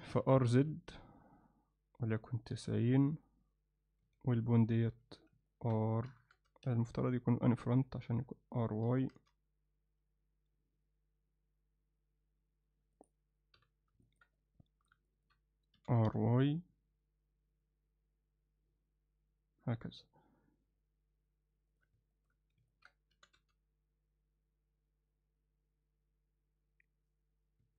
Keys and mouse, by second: 0.2 r, 4.1 z, 4.6 click, 4.9 z, 5.5 ctrl+alt+middle click, 6.1 r, 7.8 click, 8.9 r, 13.6 n, 14.1 ctrl+middle drag, 14.4-14.9 middle drag, 15.1 ctrl+middle click, 15.8 r, 22.2 ctrl+middle click, 22.7 ctrl+alt+middle click, 23.1 r.